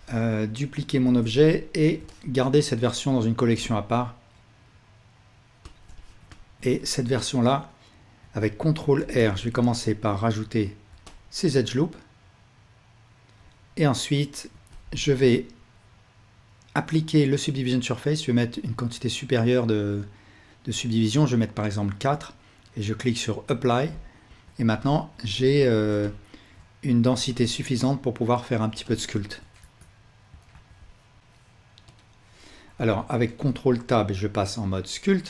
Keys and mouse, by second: 1.1 shift+d, 1.8-5.7 alt+drag, 3.5 m, 6.0-7.4 ctrl+alt+drag, 6.8 Tab, 8.2 ctrl+r, 10.9-13.3 alt+drag, 14.5 Tab, 24.4 Tab, 25.6 alt+a, 26.5-35.2 drag, 29.6 Tab, 30.6 ctrl+s, 33.5 ctrl+Tab.